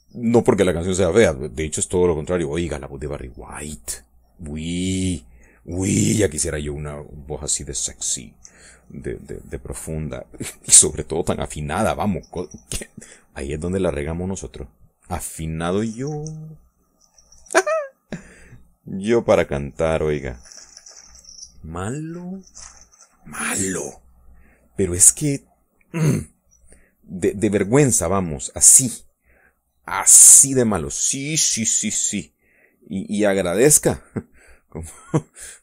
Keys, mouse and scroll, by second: 0.6 click, 2.7 click, 3.9-5.0 drag, 6.6 click, 7.7 click, 8.7 middle click, 9.4 middle click, 10.3 middle click, 15.2 middle click, 16.5-21.7 drag, 21.9 middle click, 23.4 middle click, 24.8-26.5 drag, 26.6 middle click, 27.4-29.8 drag, 29.9 middle click, 30.9-32.4 middle drag, 32.9-34.9 drag, 35.0-35.6 middle drag.